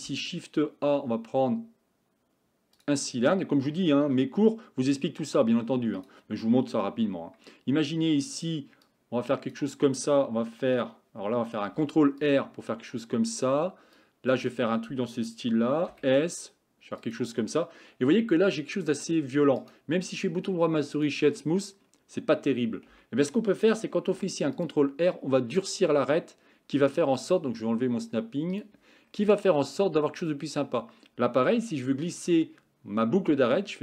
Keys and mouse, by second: 0.0 shift+a, 4.1 g, 7.0 Tab, 9.1 click, 11.7 ctrl+r, 14.1 click, 15.9 s, 18.1 Tab, 19.6-21.1 right drag, 22.9 Tab, 24.1 ctrl+r.